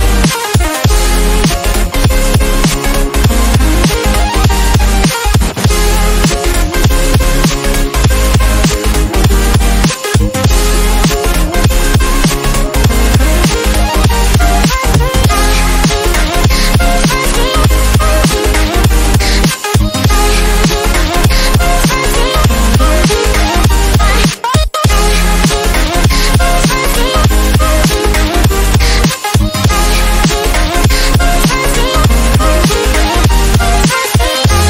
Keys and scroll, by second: 10.9 ctrl+j, 14.2 typing, 14.7 Return.